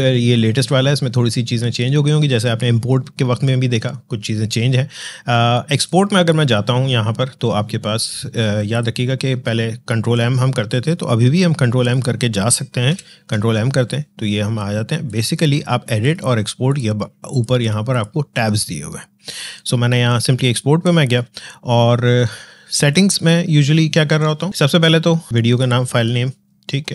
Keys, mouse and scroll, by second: 5.7 click, 8.5 click, 11.8 click, 12.7 ctrl+m, 14.9 click.